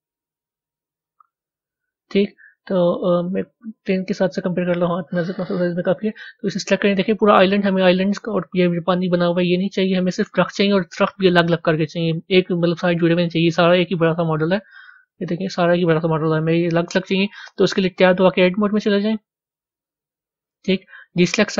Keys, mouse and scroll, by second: 1.0-1.7 scroll up 10, 1.7 scroll up 4, 1.9 scroll down 2, 3.9 click, 4.7 click, 5.7 click, 6.8-21.5 middle drag.